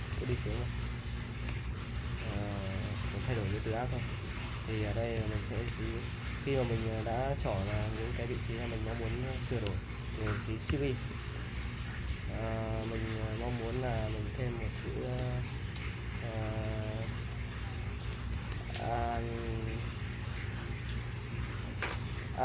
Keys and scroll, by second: 0.0-0.3 typing, 1.5-2.7 typing, 10.7 l, 18.1 shift+a, 19.0 n.